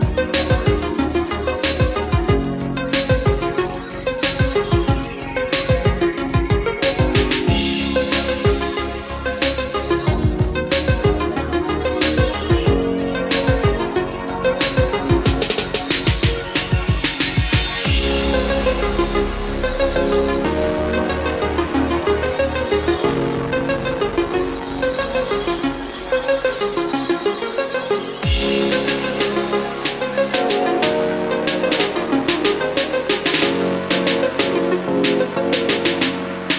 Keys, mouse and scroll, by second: 12.9-13.9 scroll down 1, 14.0-18.0 scroll up 1, 18.0-19.8 drag, 20.3 Escape, 21.6-36.0 drag.